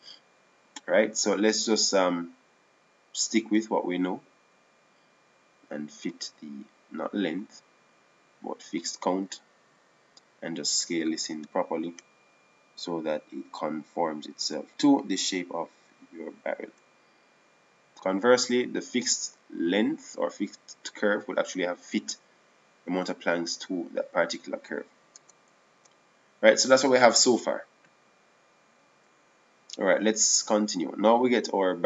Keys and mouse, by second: 0.7-3.9 drag, 5.2-6.7 drag, 8.9-11.4 drag, 11.7-13.2 right drag, 13.2 s, 21.5-23.0 middle drag, 27.1 Tab, 27.6 Tab.